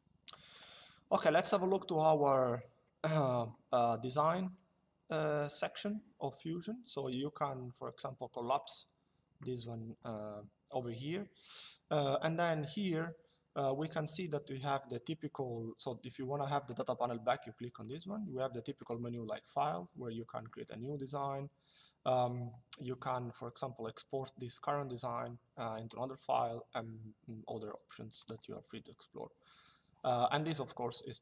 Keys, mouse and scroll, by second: 0.2 click, 8.3 click, 16.4 click, 17.5 click, 27.9 click.